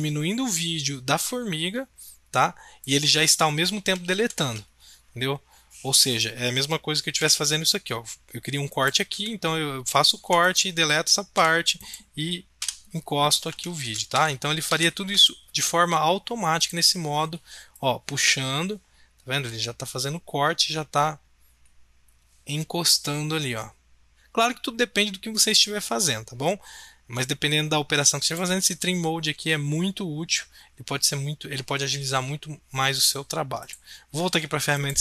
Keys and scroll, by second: 4.1 ctrl+z, 7.2 b, 9.1 s, 10.1 a, 11.3 BackSpace, 12.6 BackSpace, 13.8 ctrl+z, 14.1 ctrl+z, 14.7 ctrl+z, 24.1 ctrl+z.